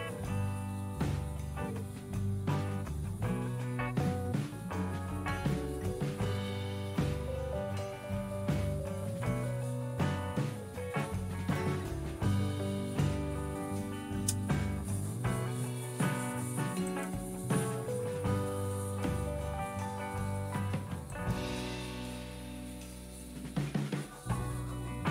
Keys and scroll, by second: 7.6-8.8 typing, 9.1 Return, 22.7 q.